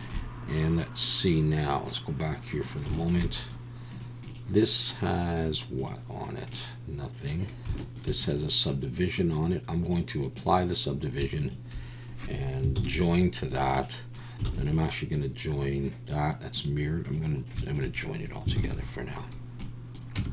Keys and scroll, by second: 12.8 ctrl+j, 14.5 alt+a, 18.6 ctrl+j, 20.2 Tab.